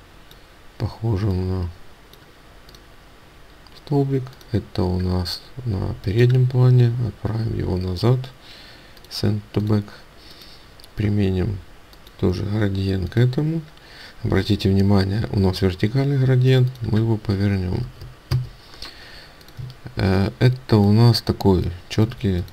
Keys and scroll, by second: 18.3 Return, 19.7 ctrl+space.